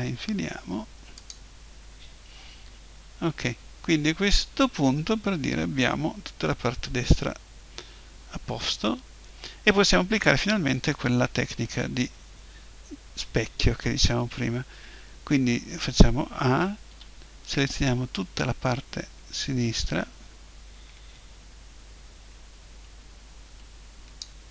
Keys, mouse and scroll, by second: 1.3-2.5 drag, 2.5 KP_1, 12.0-15.7 middle drag, 15.7 a, 16.9 b.